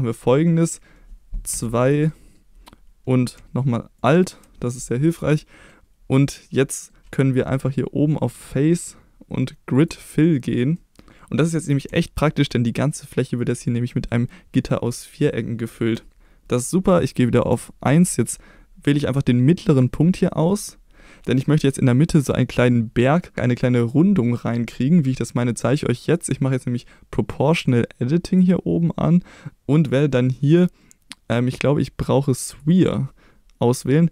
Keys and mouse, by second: 1.5 2, 2.0 middle click, 4.0 click, 5.4 middle click, 6.2 middle click, 8.4-9.9 drag, 10.8 middle click, 12.0 shift+middle click, 13.9 middle click, 14.9-16.2 middle drag, 16.2 3, 16.2 2, 17.5 1, 19.7 click, 20.5-21.2 middle drag, 28.3 click, 30.1-33.0 drag.